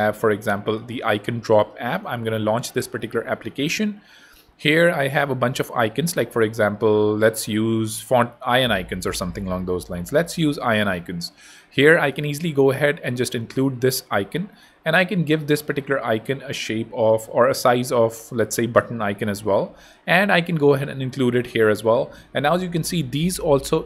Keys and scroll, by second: 19.9 super+c, 20.7 super+v.